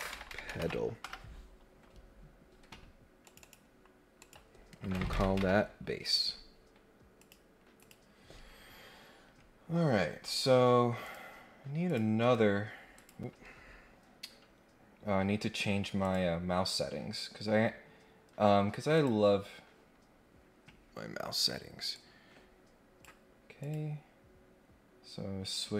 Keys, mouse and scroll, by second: 3.2 click, 3.4 click, 4.2 click, 7.1 click, 7.8 click, 9.9 scroll down 1, 10.1-10.7 scroll up 2, 11.0 click, 11.8 click, 12.9 click, 16.0 click, 18.9 click, 21.9-23.0 drag, 23.6 click.